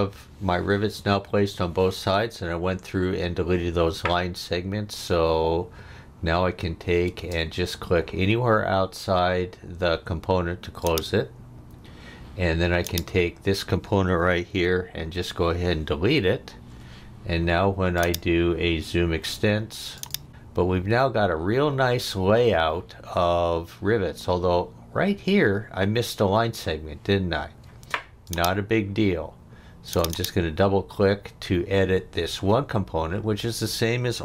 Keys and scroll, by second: 7.1 space, 15.0 Delete, 27.6 space.